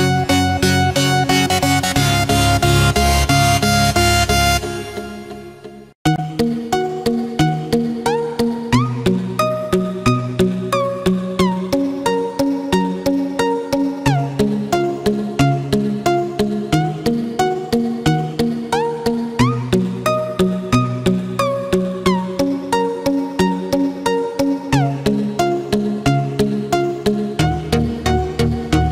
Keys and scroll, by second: 20.6 ctrl+-, 21.3 ctrl+=.